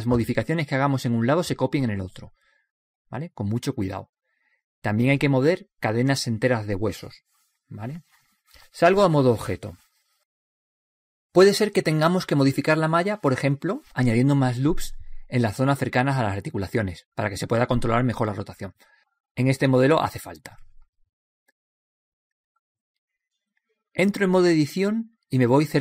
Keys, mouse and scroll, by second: 1.1-4.3 right drag, 7.6 middle click, 8.0-10.5 middle drag, 10.5-12.4 drag, 15.7-21.9 middle drag, 21.9-22.4 scroll up 1.